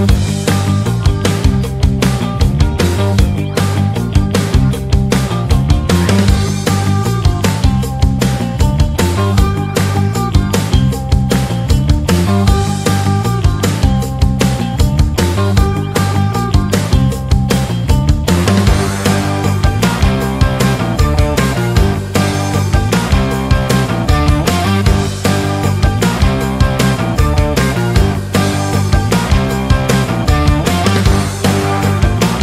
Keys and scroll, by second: 2.3 c, 13.8 shift+F2, 14.9 F3.